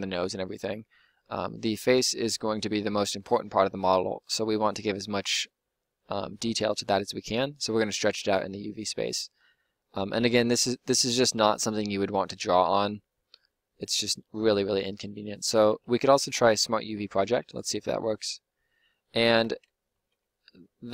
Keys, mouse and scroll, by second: 10.1-15.6 middle drag, 15.6 u, 19.4 Tab, 19.9 Tab.